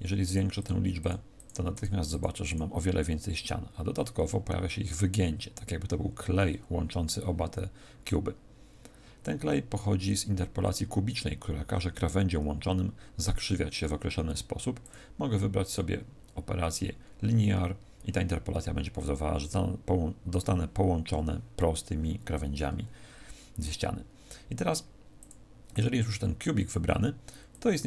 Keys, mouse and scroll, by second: 0.2 click, 0.5 click, 14.8 click, 25.1 click.